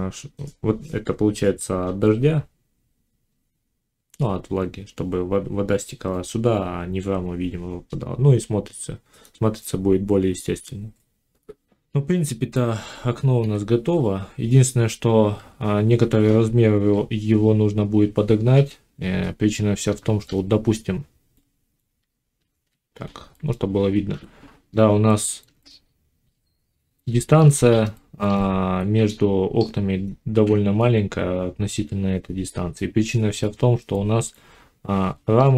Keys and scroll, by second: 15.2 7, 18.4 5, 21.8 z, 24.0 5.